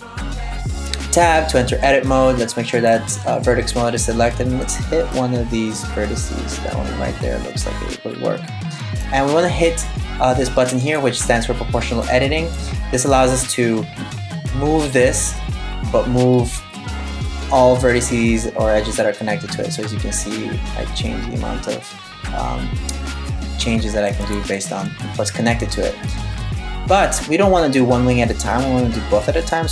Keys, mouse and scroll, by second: 2.4 click, 4.3 right click, 4.7 middle click, 10.5 click, 11.5 click, 14.8 g, 23.9 super+z, 29.0 click.